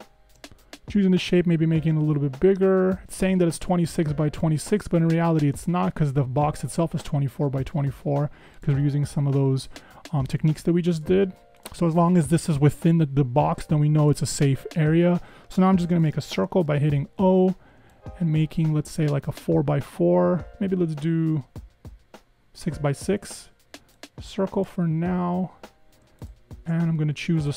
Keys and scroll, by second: 16.6 o.